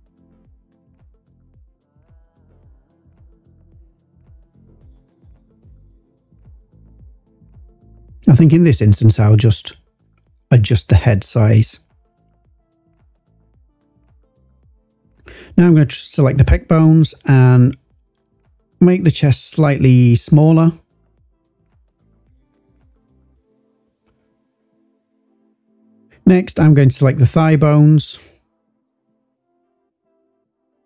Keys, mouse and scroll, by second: 0.1 s, 0.4 y, 2.7 click, 3.7 s, 3.9 x, 5.3 click, 6.1 ctrl+z, 6.2 ctrl+z, 6.6 ctrl+z, 6.8 ctrl+z, 7.2 ctrl+z, 8.4 click, 9.4 s, 14.5 click, 15.2 click, 16.2 shift+click, 17.4 s, 19.3 click, 19.9 click, 20.7 shift+click, 21.5 s, 23.1 click, 26.7 click, 27.9 shift+click, 29.0 s, 29.2 x, 30.5 click.